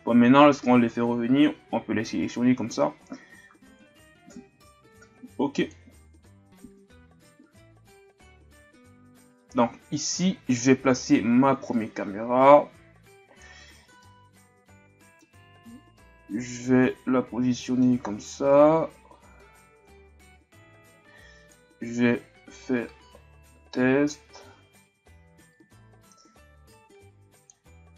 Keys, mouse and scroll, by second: 3.8-6.1 drag, 6.1-6.6 scroll down 1, 6.6-8.7 scroll down 3, 8.7-9.7 scroll down 1, 9.7-11.1 scroll up 1, 11.1-13.7 drag, 13.7-14.0 scroll down 2, 14.0-15.5 middle drag, 15.5-16.0 scroll up 1, 16.0-18.0 middle drag, 18.0-18.6 scroll up 2, 18.6-19.3 shift+scroll down 2, 19.3-20.1 shift+scroll down 2, 20.1-20.7 ctrl+scroll up 1, 21.5-24.6 drag.